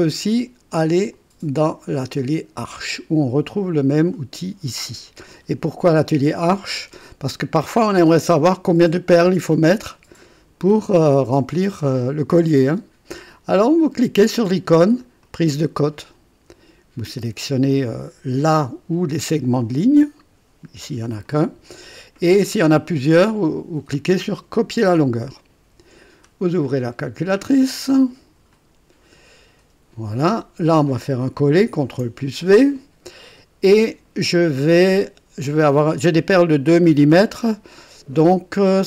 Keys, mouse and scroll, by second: 0.8 click, 2.7 click, 15.2 click, 19.7 click, 24.6 click, 28.5 click, 31.7 ctrl+v.